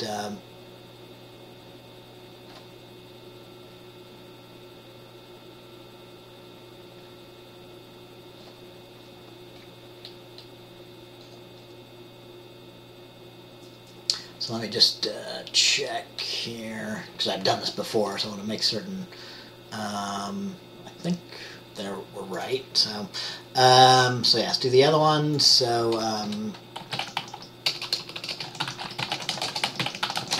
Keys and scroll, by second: 26.4 Return, 27.0-30.3 typing.